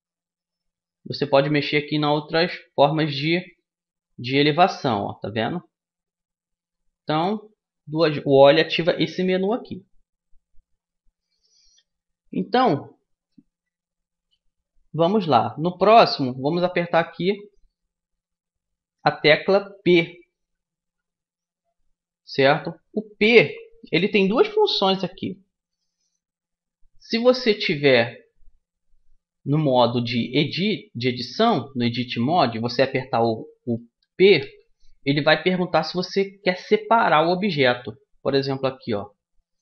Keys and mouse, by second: 1.4-3.1 drag, 6.8 o, 13.2 a, 16.9-19.7 drag, 20.9 p, 27.0 a, 29.3-32.8 drag, 34.1 p, 38.6 a.